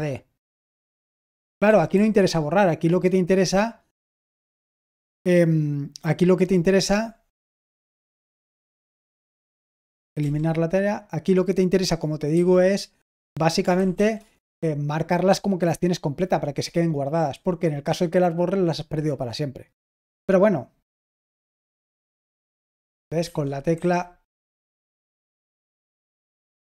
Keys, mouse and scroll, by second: 0.0-0.5 typing, 1.6 typing, 12.3 typing, 13.6-14.4 typing, 20.7-21.4 typing, 23.2 Escape, 23.7 v, 24.2 Escape, 24.5 Escape, 25.5-26.6 typing.